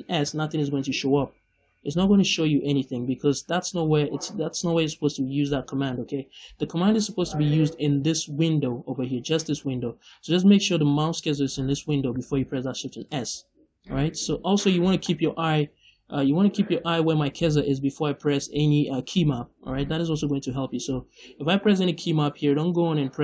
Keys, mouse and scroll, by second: 0.5 shift+s, 12.8 shift+s, 13.8 right click.